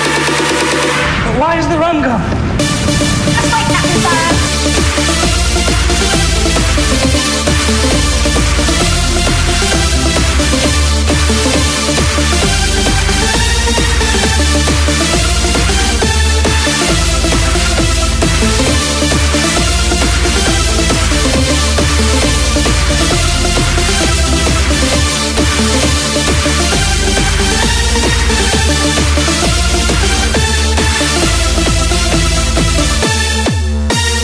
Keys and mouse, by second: 3.8 shift+f, 26.5-28.6 right drag, 28.6 KP_Add, 28.6-29.8 drag, 29.1 KP_Add, 29.8 KP_Add, 29.8-34.2 middle drag.